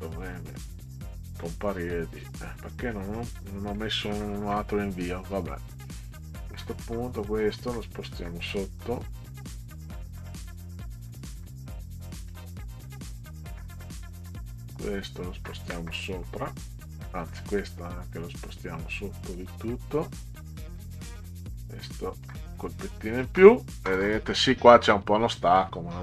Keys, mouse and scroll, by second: 0.2 click, 0.9 click, 5.5 middle click, 8.5 click, 9.1 click, 9.9 click, 10.1 click, 10.3 click, 10.6 click, 12.3 click, 12.8 click, 14.2 click, 17.2 click, 19.3 click, 20.8 click, 22.3 click, 25.4 middle click.